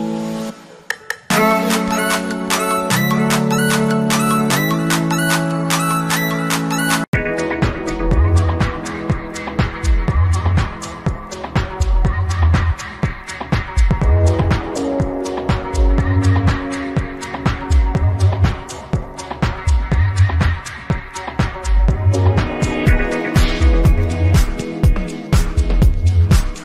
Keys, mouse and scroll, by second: 0.1-1.8 alt+scroll down 2, 1.8-2.4 drag, 5.1-5.7 alt+scroll up 1.